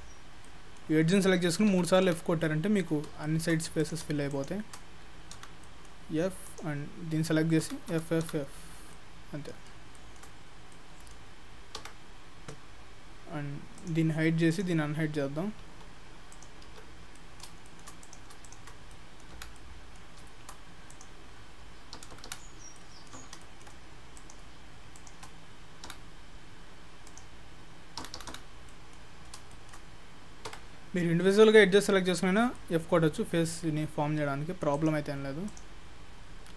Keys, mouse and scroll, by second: 0.5 middle click, 1.3 f, 1.7 f, 2.1 f, 2.5 middle click, 3.3 shift+middle click, 3.8 click, 4.3 shift+click, 5.4 f, 5.7 middle click, 6.5 click, 7.7 f, 7.9 f, 8.3 f, 8.5 scroll down 5, 8.9 middle click, 10.0 shift+middle click, 10.4-10.7 scroll up 3, 10.7 middle click, 11.8 Tab, 13.8 click, 14.6 click, 15.0 scroll down 3, 15.2-15.6 scroll up 2, 15.6 Tab, 16.3 click, 16.7 Tab, 17.0-17.5 scroll up 2, 17.2 middle click, 17.7 shift+middle click, 18.1 click, 18.5 shift+click, 19.0 middle click, 19.4 f, 19.6 scroll up 1, 19.6 middle click, 21.0 click, 22.0-22.4 f, 22.8 middle click, 23.5 shift+middle click, 24.2 click, 25.0 shift+click, 25.9 f, 27.1 click, 28.1 f, 28.7 middle click, 29.2-29.6 scroll down 4, 29.6 shift+middle click, 30.6 Tab, 32.2 scroll down 1, 33.5 middle click, 34.8 click, 35.3 Tab, 35.5 click, 36.0-36.3 scroll up 1, 36.3-36.5 scroll down 2.